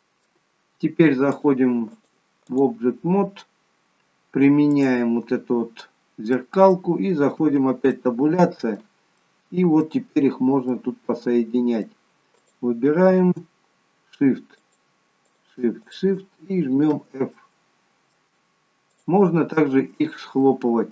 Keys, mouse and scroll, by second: 0.0 middle click, 0.0 g, 1.4 click, 1.9 click, 6.5 click, 6.5 middle click, 7.4 Tab, 7.9 middle click, 9.2 middle click, 10.4 scroll up 1, 10.6 middle click, 12.4 click, 14.6 shift+click, 15.5 shift+click, 16.9 shift+click, 16.9 f, 17.4 middle click, 19.0 shift+click, 20.0 shift+click.